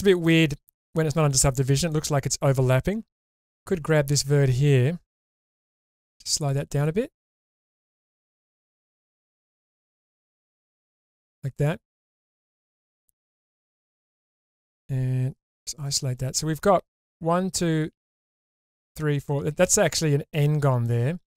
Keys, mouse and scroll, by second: 0.1-0.8 scroll up 1, 1.9 middle click, 3.2 1, 3.8 click, 5.4 g, 5.5 g, 6.5 click, 7.4 click, 7.9 g, 8.0 g, 8.8 click, 9.8 click, 10.4 g, 10.6 g, 11.2 click, 11.6 middle click, 14.0 middle click, 15.4 /, 16.2 middle click, 20.8-21.3 middle drag.